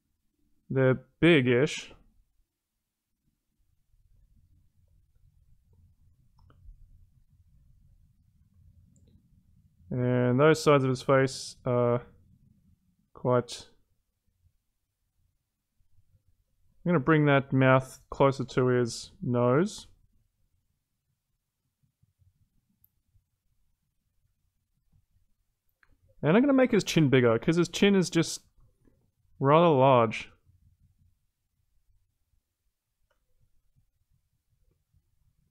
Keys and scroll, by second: 26.7 ctrl+z.